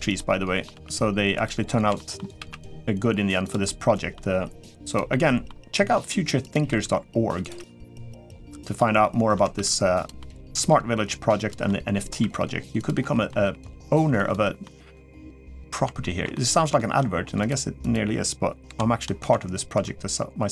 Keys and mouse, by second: 0.1 middle click, 1.6 g, 1.7 shift+middle click, 2.1 shift+d, 3.4 middle click, 4.1 g, 4.9 middle click, 5.5 g, 6.5 r, 7.3 g, 8.0 middle click, 8.8 middle click, 9.3 shift+d, 10.0 middle click, 10.7 g, 11.4 middle click, 12.0 r, 12.8 middle click, 13.2 g, 14.4 middle click, 14.9 middle click, 15.8 shift+middle click, 16.1 middle click, 16.5 shift+middle click, 17.2 click, 17.7 click, 18.4 l, 19.0 shift+d, 20.4 r.